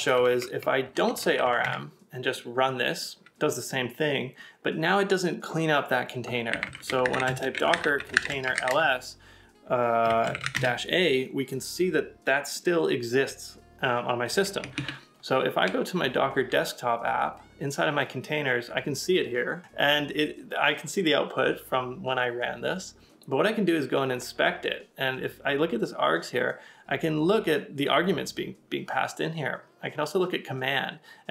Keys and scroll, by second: 0.1 alt+Left, 0.9 BackSpace, 1.0 BackSpace, 1.1 BackSpace, 1.6 Return, 6.3-8.7 typing, 10.1-10.9 typing, 14.7 super+Tab, 18.6 super+Tab.